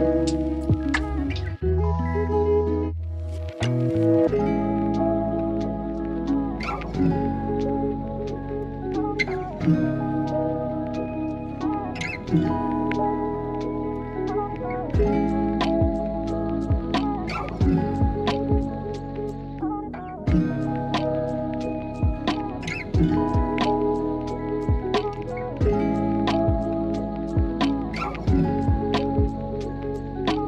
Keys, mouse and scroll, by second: 2.0-3.3 drag, 3.9-4.6 drag, 5.2 click, 6.2 middle click, 7.7 KP_3, 8.8 click, 10.2 click, 11.2 e, 12.9 click, 14.9 s, 15.2 y, 15.8 KP_0, 16.2 click, 16.9 r, 18.5 s, 19.5 click, 20.5 click, 21.4-24.8 drag, 25.6 click, 26.8 click, 28.0 KP_1, 29.2 shift+middle click.